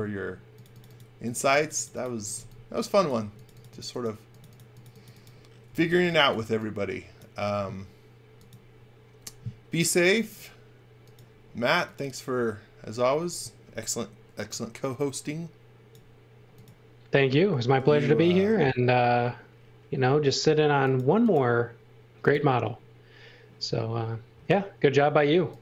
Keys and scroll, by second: 1.9-3.1 typing, 5.4-6.3 typing.